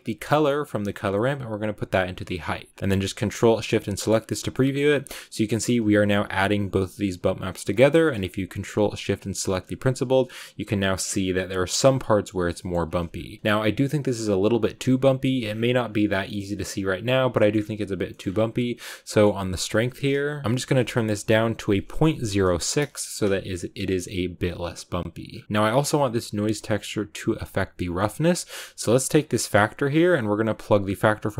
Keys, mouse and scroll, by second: 2.7 middle click, 3.7 ctrl+shift+click, 4.4-5.7 shift+middle drag, 5.7 ctrl+shift+click, 6.5 ctrl+shift+click, 7.0 ctrl+shift+click, 7.7-9.1 scroll down 5, 9.1-11.0 ctrl+shift+drag, 11.0-12.5 scroll up 4, 12.5 middle click, 12.9-13.4 scroll up 3, 13.4 scroll down 1, 13.5-15.4 middle drag, 15.5-16.0 scroll down 8, 16.0-17.5 shift+middle drag, 17.5-18.7 scroll up 8, 25.4-31.3 drag.